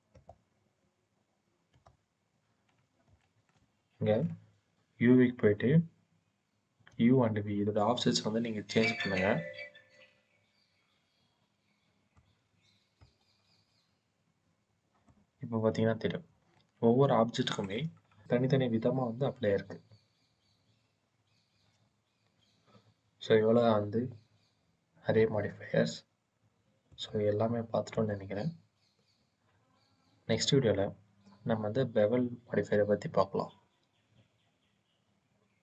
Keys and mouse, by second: 1.7-2.9 drag, 3.1 shift+drag, 3.3 shift+middle click, 6.8-12.0 drag, 12.9-14.9 drag, 16.4 shift+drag, 16.6-17.5 shift+middle drag, 25.0 click, 26.8-27.8 drag, 30.2-33.7 drag.